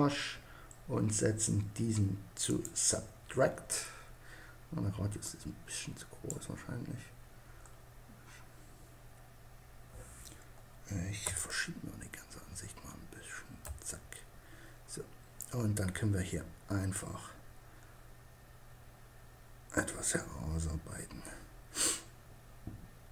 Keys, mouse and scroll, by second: 0.7-3.8 drag, 4.6-6.4 drag.